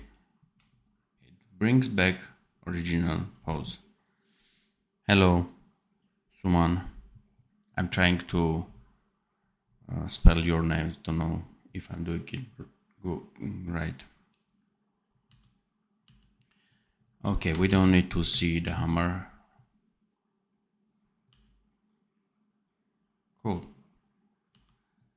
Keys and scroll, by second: 15.2 d, 16.0 d, 17.6 ctrl+c, 18.5 ctrl+v, 21.2 d, 24.4 d.